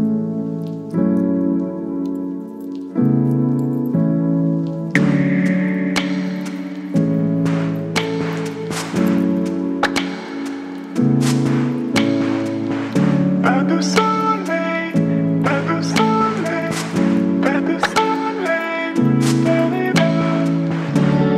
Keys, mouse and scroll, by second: 7.9 click, 11.4 click, 12.6 right click, 13.9 click, 15.8 v, 16.7-19.5 drag, 20.7 ctrl+t.